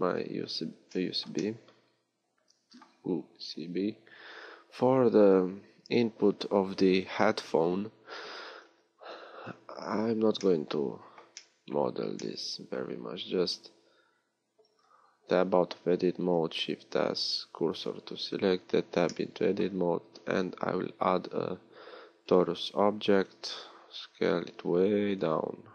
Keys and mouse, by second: 0.0 z, 0.4 z, 3.9-8.6 middle drag, 8.6 a, 9.8 middle click, 14.9 Tab, 16.6 shift+s, 18.6 Tab, 20.0 shift+a, 23.5 s.